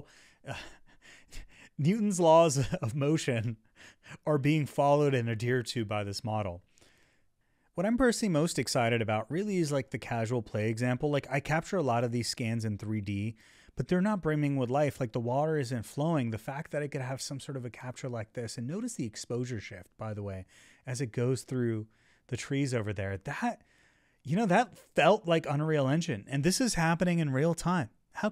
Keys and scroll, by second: 0.0 Right, 5.0 Right, 6.9 Left, 7.4 Up, 8.8 Up, 9.8 Right, 10.8 Down, 11.2 Right, 13.0 Right, 14.2 Up, 15.2 Down, 15.6 Right.